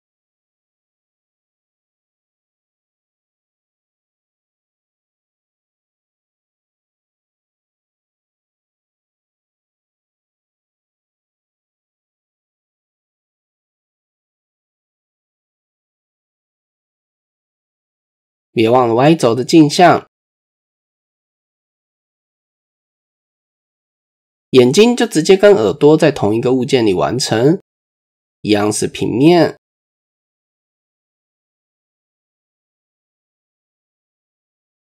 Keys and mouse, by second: 1.5-2.4 drag, 2.9 c, 7.3-8.5 drag, 9.1 ctrl+r, 10.5 KP_7, 11.0 a, 12.1 click, 13.3 r, 14.8 KP_1, 15.2 Tab, 16.0-16.3 shift+drag, 16.7-17.1 shift+middle drag, 17.6-18.0 shift+middle drag, 19.8-21.3 drag, 22.2 click, 22.5 click, 22.8 middle click, 23.7 middle click, 24.7 KP_1, 26.7 Tab, 27.9 click, 28.4 shift+middle click, 30.0 shift+a, 32.3 click, 33.7-34.8 drag.